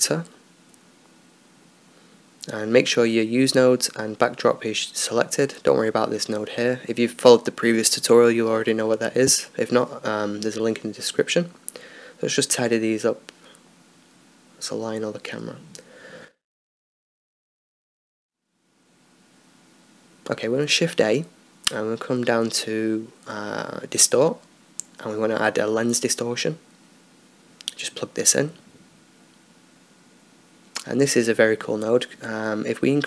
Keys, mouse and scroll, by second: 7.1-33.0 drag.